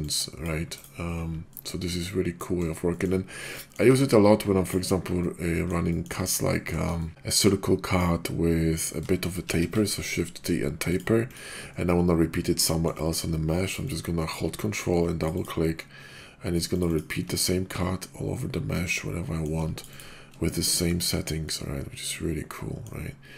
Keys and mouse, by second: 0.0 click, 0.8 drag, 1.5 middle click, 2.3 middle drag, 2.8 shift+middle drag, 3.6 middle click, 3.9 d, 5.2-5.7 drag, 5.9 shift+click, 6.4 click, 7.1-8.2 drag, 9.5 shift+t, 10.9 click, 11.3 click, 12.6 middle click, 13.7 ctrl+click, 15.2 ctrl+click, 16.8-17.2 ctrl+drag, 18.3-19.4 middle drag, 19.8-20.2 ctrl+drag, 21.5-22.8 middle drag.